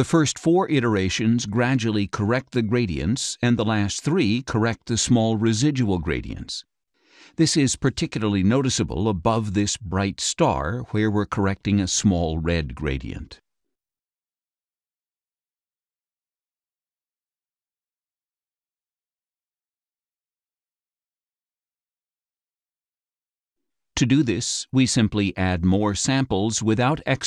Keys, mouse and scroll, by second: 0.9 click, 1.8 click, 3.2 click, 4.4 click, 7.9 click, 14.6 click, 16.1 click, 17.4 click, 18.7 click, 20.5 click, 21.2 click, 24.5 click, 25.1 click, 25.5 click, 25.8 click, 26.2 click.